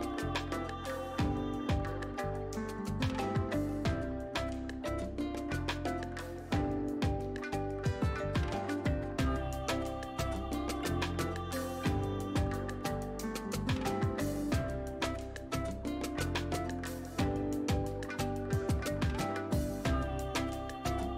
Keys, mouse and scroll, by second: 0.6 click, 6.5-12.6 drag, 12.6 space, 12.7 click, 13.2 space, 13.8 space, 15.6-16.5 scroll up 1, 16.5 space, 16.7 click, 17.0 space, 18.8-21.1 drag.